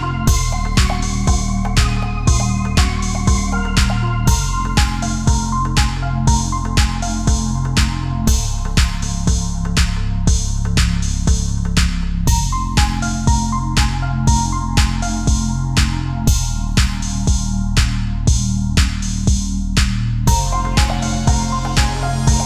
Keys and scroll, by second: 1.4 ctrl+z, 19.1 ctrl+-, 20.1 ctrl+=.